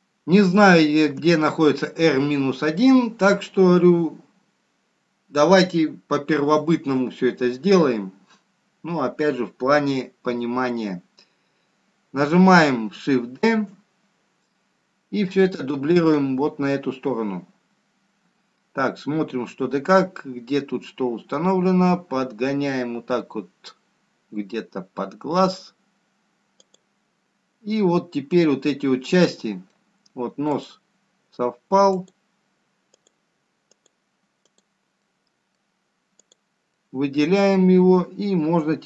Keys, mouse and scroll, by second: 1.5-1.9 scroll down 1, 15.6 shift+d, 32.5 middle click, 32.5-33.7 scroll up 1, 33.7 click, 34.1 click, 35.1 click, 35.9 click, 36.6 click, 37.4 middle click, 38.7 click.